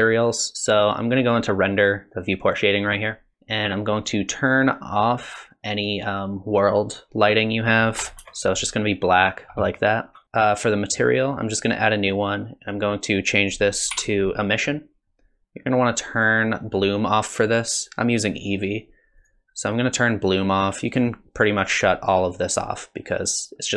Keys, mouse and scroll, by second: 3.3 click, 4.0 click, 7.4 click, 11.3 click, 13.4 click, 16.2 click, 16.7 click, 19.2 click, 21.0 click, 21.8 click.